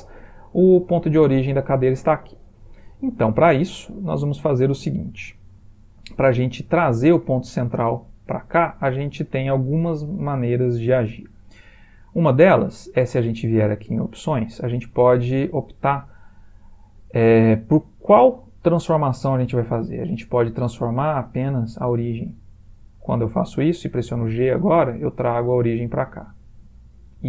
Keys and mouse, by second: 2.2-3.0 middle click, 3.8 ctrl+middle click, 3.8 ctrl+middle click, 3.9 ctrl+middle click, 4.2 middle click, 4.8 shift+middle click, 5.6 middle click, 5.7 middle click, 10.5 middle click, 14.3 click, 24.0 g.